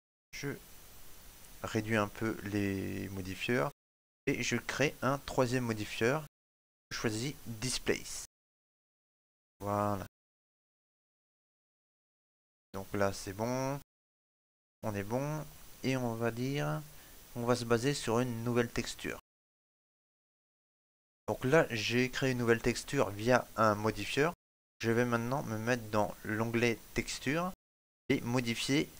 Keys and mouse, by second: 13.9 middle click, 18.2-28.9 click.